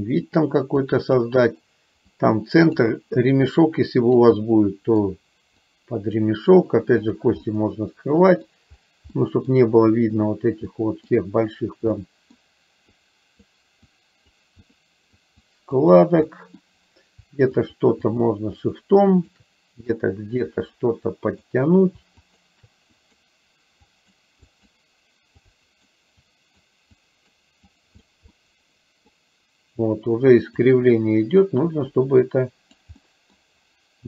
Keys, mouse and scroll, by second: 0.9 click, 2.1 click, 3.7 click, 4.4 middle click, 5.6 click, 7.5-8.6 middle drag, 9.2 middle click, 10.9 middle click, 12.1 middle click, 13.1 click, 13.9 click, 14.7 click, 15.2 click, 15.9 click, 16.2 middle click, 17.6 shift+click, 18.1 shift+click, 18.6 shift+click, 19.2 shift+click, 19.9-21.6 drag, 22.2 shift+click, 23.0 click, 24.0 click, 24.5 click, 25.5 click, 26.4 click, 27.0 click, 27.7 click, 28.4 middle click, 30.6 click, 32.4 click, 33.1 middle click.